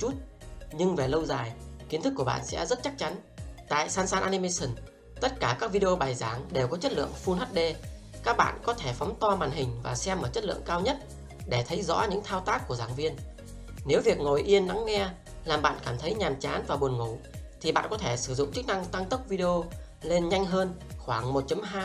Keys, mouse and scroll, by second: 0.0 click, 1.8 r, 2.1 click, 3.5 r.